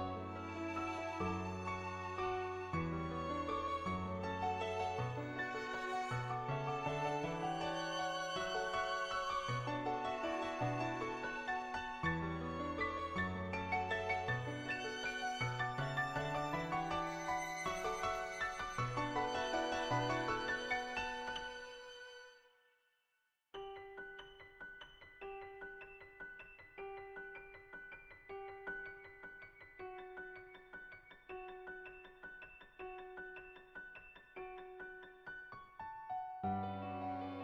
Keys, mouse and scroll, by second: 0.2 ctrl+z, 1.2 click, 6.2 ], 6.3 ], 6.6 click, 6.6 ], 7.8 [, 7.9 [, 8.2 click, 12.3 click, 12.7-13.7 drag, 13.7 [, 13.7 [, 13.9 click, 13.9 [, 16.6 ], 16.7 ], 17.0 click, 17.5 ctrl+z, 17.7 [, 18.1 click, 18.7 [, 19.0 click, 19.4 [, 19.7 click, 20.2 [, 20.4 click, 22.1 click, 24.3 click, 25.1 click, 25.7 click, 26.1 ctrl+z, 26.4 click, 26.8 ctrl+z, 27.1 click, 28.0 click, 32.9 ], 33.3 ], 33.4 ], 33.5 click, 34.2 click, 34.6 click, 35.1 ctrl+z, 35.2 ], 35.4 click, 36.8 click.